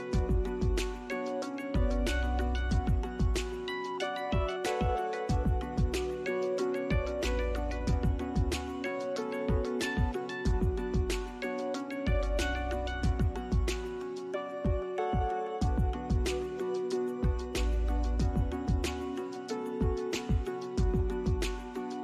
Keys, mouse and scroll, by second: 0.0 alt+middle click, 0.4 alt+scroll down 1, 1.6 alt+middle click, 2.0 alt+click, 2.5-2.8 scroll down 1, 3.1 alt+middle click, 5.9 scroll down 1, 6.9 alt+middle click, 9.8 scroll down 1, 11.6 BackSpace, 12.8 ctrl+z, 13.6 scroll up 1, 14.2 BackSpace, 15.1 alt+middle click, 15.4 alt+scroll up 1, 16.3 alt+middle click, 16.7 alt+scroll up 1, 17.3 alt+middle click.